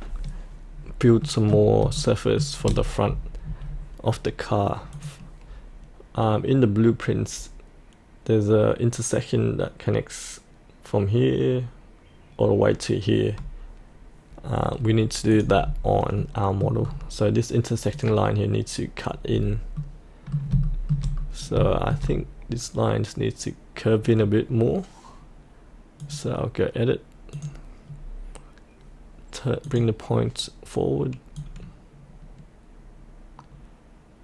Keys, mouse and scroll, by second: 0.7-1.2 scroll up 2, 1.2 middle click, 1.9 shift+middle click, 2.7-4.1 scroll down 1, 4.9 click, 15.6-16.1 scroll up 1, 16.2 middle click, 16.8 scroll down 1, 17.9 click, 19.2-19.7 scroll up 1, 19.7 middle click, 20.6 shift+middle click, 21.1-21.5 scroll down 1, 21.6 shift+middle click, 26.0-34.2 drag.